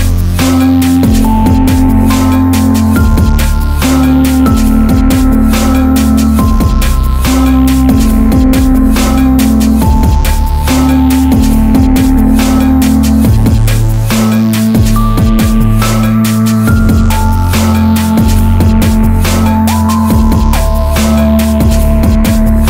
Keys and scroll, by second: 14.6 Down, 20.9 ctrl+t, 21.7 ctrl+t, 22.4 space.